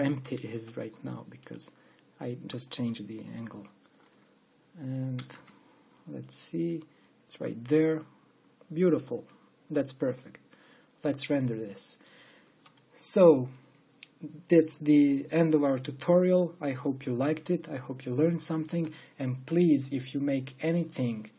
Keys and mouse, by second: 0.0 shift+space, 5.9 KP_0, 6.1 KP_0.